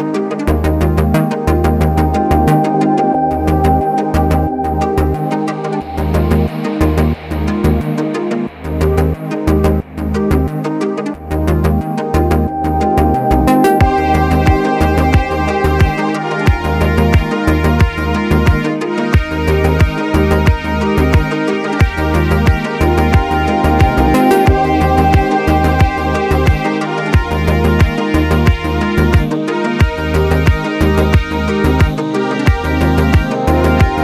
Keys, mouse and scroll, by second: 1.6-2.0 scroll down 2, 2.0-2.9 middle drag, 2.9-3.7 scroll down 5, 3.7-6.7 middle drag, 6.9-7.3 scroll down 2, 7.3-8.6 middle drag, 8.6 click, 9.3-9.8 scroll up 2, 9.8-10.4 shift+middle drag, 10.4-11.6 scroll up 1, 11.6 click, 14.9 click, 15.7-16.9 drag, 16.9-20.4 scroll down 3, 20.4-23.4 drag, 24.1-27.0 drag, 27.0-27.6 scroll up 2, 27.6-28.0 shift+middle drag, 28.0-29.5 scroll up 1, 29.5 click, 30.0-31.3 right drag, 31.3 click, 31.7-34.0 right drag.